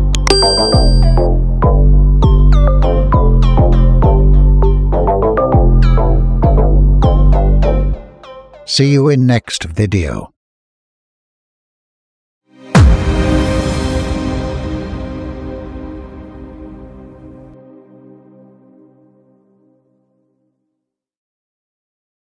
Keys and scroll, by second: 5.4 ctrl+0, 7.0 ctrl+0.